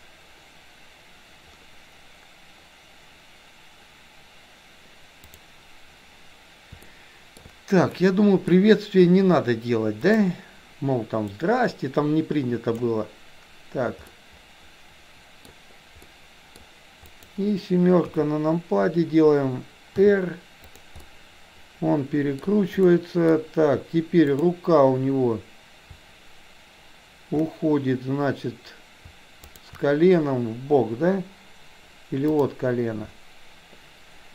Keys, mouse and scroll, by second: 5.3 click, 7.0-7.5 shift+middle drag, 8.0-8.6 middle drag, 11.3-13.0 drag, 14.1-15.5 middle drag, 16.1-16.6 middle drag, 17.1 click, 18.1 KP_7, 20.1 r, 21.1-22.5 middle drag, 23.0 middle click, 24.5 click.